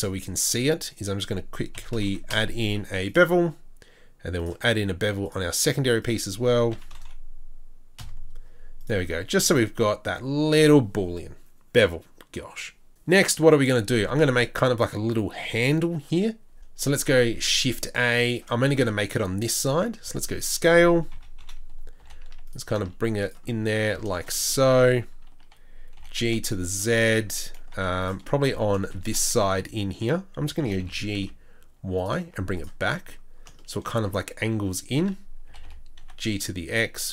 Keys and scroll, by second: 16.9 shift+a, 19.7 Tab, 20.0 s, 21.1 KP_3, 22.0 KP_1, 22.0 g, 22.7 s, 25.9 g, 27.7 z, 29.0 3, 30.4 2, 30.6 g, 32.2 z, 34.4 z, 34.4 a, 35.4 a, 35.5 g.